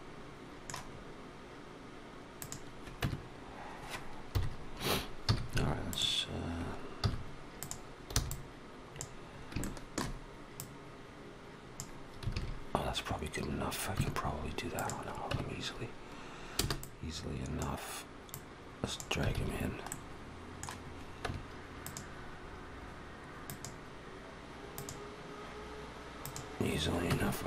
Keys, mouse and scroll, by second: 0.8 scroll up 1, 2.2 click, 2.8 Tab, 4.1 KP_1, 5.1 z, 6.8 z, 8.0 b, 9.1 scroll up 3, 9.4 shift+middle click, 10.4 click, 12.2 alt+a, 13.8 Tab, 14.6 click, 15.1 Tab, 16.4 b, 18.2 click, 19.2 alt+a, 19.7 middle click, 21.1 Tab, 21.7 click, 23.3 click, 24.6 click, 26.0 click, 26.9 Tab.